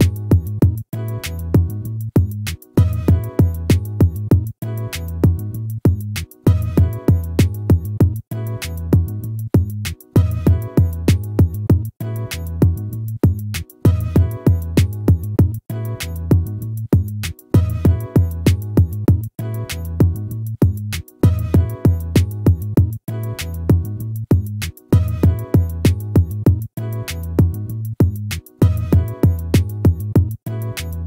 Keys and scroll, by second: 29.2 ctrl+-.